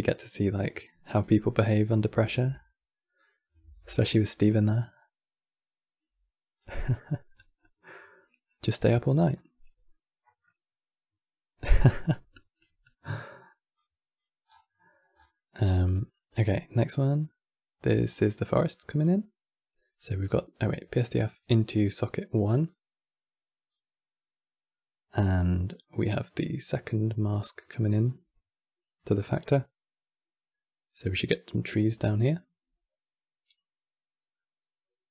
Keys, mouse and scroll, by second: 2.0 shift+d, 2.9 click, 5.7 shift+d, 8.0-9.0 scroll up 9, 9.0-11.6 middle drag, 11.6 click, 13.4 click, 14.3 scroll down 6, 14.4 middle click, 14.9 scroll down 4, 15.0-17.8 middle drag, 17.8 click, 21.0-22.3 middle drag, 22.3 click, 25.0-26.4 middle drag, 26.4 click.